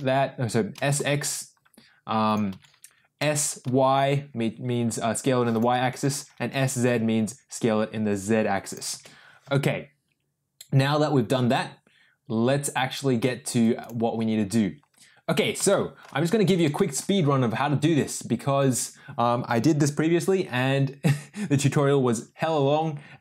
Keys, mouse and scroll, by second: 0.7 s, 2.5 ctrl+z, 3.2 s, 5.7 ctrl+z, 6.3 s, 8.9 ctrl+z, 15.7-16.0 shift+middle drag, 16.7 shift+middle click.